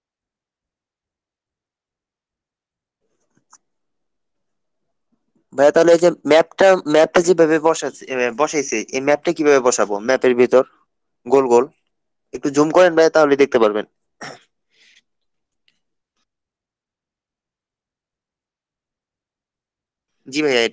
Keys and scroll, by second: 5.2 ctrl+space, 6.8 ctrl+space, 7.8 ctrl+space, 10.8 ctrl+space, 14.2 ctrl+space, 15.4 ctrl+space, 19.3 ctrl+space.